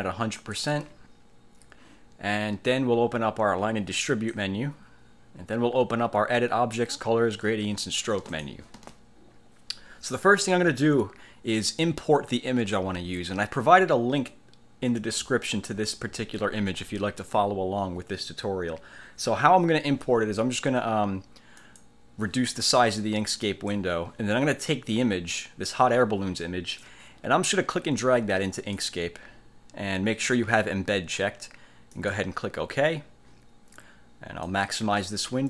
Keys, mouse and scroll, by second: 0.5 click, 4.3 click, 8.5 click, 21.7 click, 23.0-24.0 drag, 26.9-29.1 drag, 32.1 click, 34.6 click.